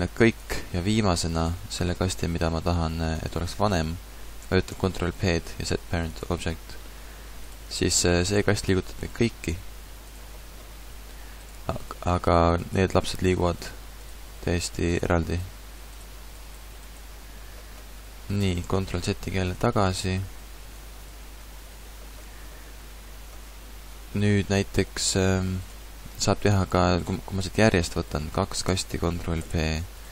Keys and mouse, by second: 4.7 ctrl+p, 7.0 a, 8.2 g, 13.2 g, 14.1 g, 15.4 g, 16.4 right click, 18.4 ctrl+z, 18.6 ctrl+z, 18.9 ctrl+z, 19.2 ctrl+z, 19.6 ctrl+z, 20.1 ctrl+z, 20.8 ctrl+z, 21.1 ctrl+z, 21.4 ctrl+z, 22.2 a, 26.2 g, 28.6 ctrl+p.